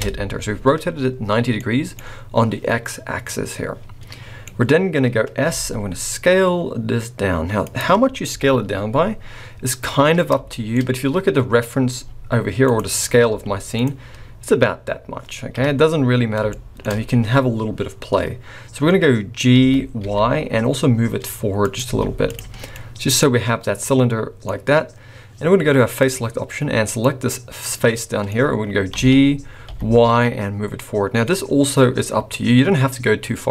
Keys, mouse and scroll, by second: 1.3 scroll down 3, 1.5 middle click, 3.3 middle click, 4.5-5.4 scroll up 3, 5.4 s, 8.3 KP_1, 9.2-9.8 scroll down 2, 9.8-10.3 scroll down 4, 10.5 shift+middle click, 10.7-11.3 scroll up 2, 11.4-12.0 scroll up 2, 12.0 s, 13.3 z, 15.5 KP_3, 16.0-16.5 scroll up 5, 16.5 shift+middle click, 17.9-18.5 scroll up 4, 19.5 g, 21.9 z, 22.5-22.9 scroll down 4, 22.7 middle click, 24.4-25.1 scroll up 3, 26.0 click, 26.8 click, 27.3 scroll down 2, 27.7 middle click, 28.9 g.